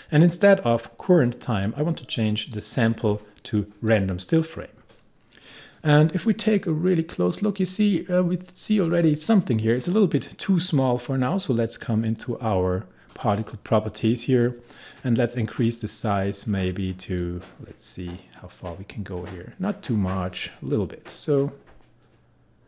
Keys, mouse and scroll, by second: 2.5 click, 6.6-7.6 scroll up 1, 10.1-12.6 scroll down 1, 17.2-22.6 drag.